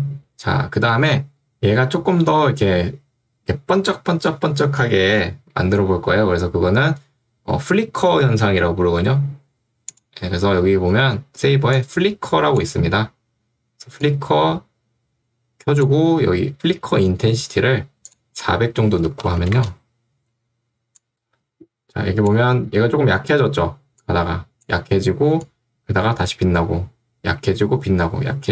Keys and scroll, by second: 11.2 ctrl+2, 17.0 Escape, 18.7-19.7 typing.